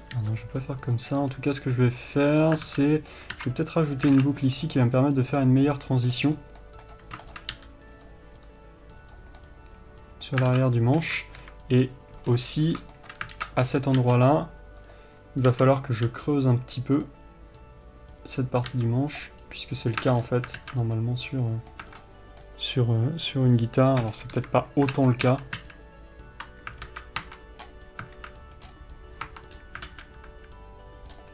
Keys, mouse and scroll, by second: 0.9 b, 1.6 scroll down 2, 2.9 scroll up 2, 3.0 alt+a, 3.6 ctrl+r, 4.4 alt+a, 4.5-7.1 middle drag, 5.2 scroll up 2, 6.5 scroll up 2, 7.1 click, 7.8 g, 8.6-9.4 drag, 9.7-19.0 middle drag, 10.8 alt+a, 11.3 KP_2, 12.6-13.2 scroll down 1, 13.6 alt+z, 14.0-14.4 scroll up 1, 15.1 b, 19.0 s, 20.4 Tab, 20.4-20.9 scroll down 1, 20.9 alt+z, 21.3-31.3 middle drag, 22.2 Tab, 24.6 KP_3, 25.8 ctrl+z, 27.2 alt+a, 27.5 Tab, 27.9-28.5 scroll down 2, 28.5 alt+a, 29.0-29.6 scroll up 2, 29.6 Tab, 29.9-30.2 scroll up 2, 30.2 alt+a.